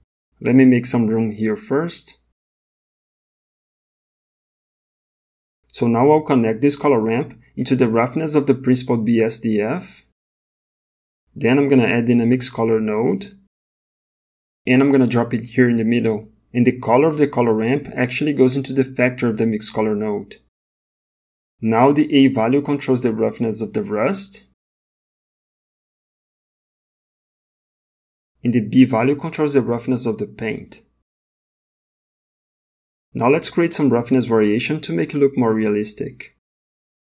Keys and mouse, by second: 1.1 g, 4.0 click, 4.3 middle click, 7.9-9.6 drag, 11.9 shift+a, 17.6 click, 18.0 click, 29.0 click, 33.8 middle click, 34.9 middle click, 36.5 middle click.